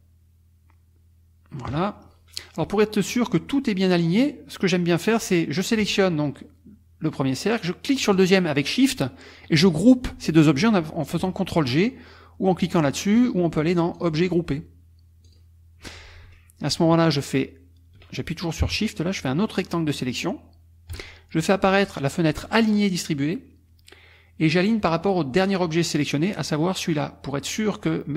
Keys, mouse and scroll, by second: 2.0 ctrl+middle click, 2.3 click, 7.9 shift+click, 14.0 click, 15.3 click, 19.2-20.2 shift+drag, 22.6 click.